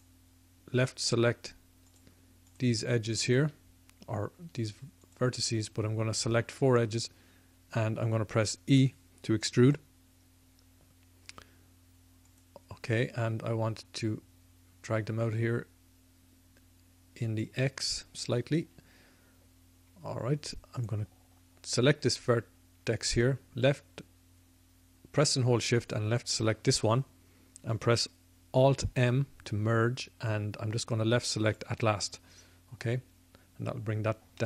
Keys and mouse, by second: 9.7 e, 14.1-17.5 drag, 20.8-31.6 drag, 28.5 alt+m, 31.6 alt+m, 34.3 middle click.